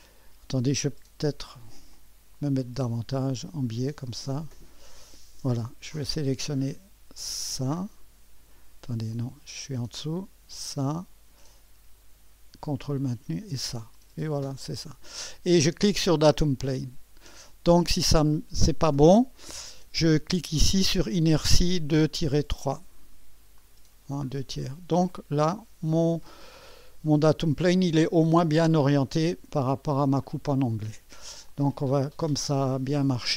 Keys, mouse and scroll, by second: 0.9 click, 1.9-2.9 drag, 3.6 right click, 4.4-5.7 drag, 7.6 click, 9.1-10.2 drag, 10.5-11.6 drag, 13.1-15.6 ctrl+drag, 16.3-17.5 drag, 22.0 click, 22.6 click, 23.6 click, 24.3-25.6 scroll down 2, 25.1-29.6 drag, 30.3-31.0 scroll up 2, 31.0-32.0 scroll up 1, 31.5-33.3 drag.